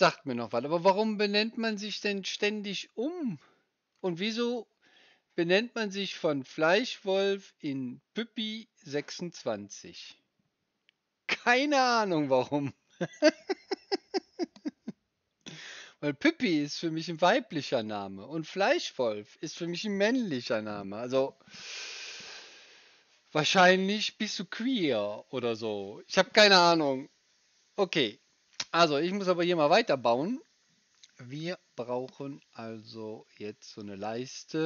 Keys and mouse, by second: 28.2-34.6 drag, 28.2-34.6 right drag.